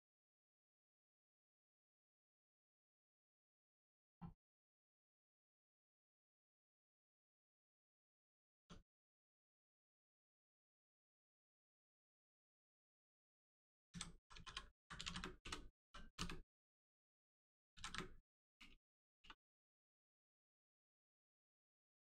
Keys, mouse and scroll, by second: 4.3 middle click, 4.8 shift+middle click, 5.1 middle click, 5.3-5.6 scroll up 1, 5.7 shift+middle click, 6.5 scroll down 1, 6.8 middle click, 8.1 Tab, 8.9 middle click, 12.3 click, 14.1 r, 14.4 i, 14.7 m, 15.0 s, 16.1 d, 17.6 a, 17.7 s, 17.8 s, 18.5 BackSpace.